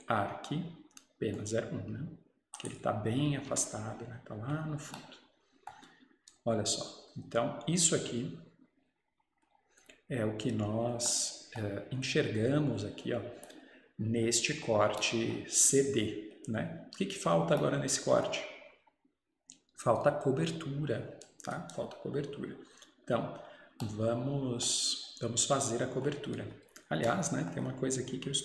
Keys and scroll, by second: 3.3 Escape, 3.6 Escape.